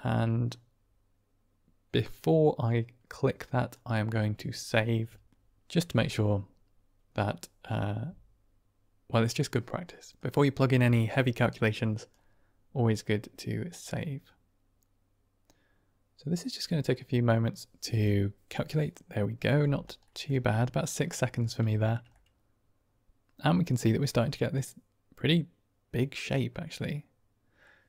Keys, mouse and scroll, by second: 10.1-12.0 drag, 20.0 middle click, 21.6 shift+middle drag, 22.0-23.6 middle drag, 24.5-27.6 middle drag.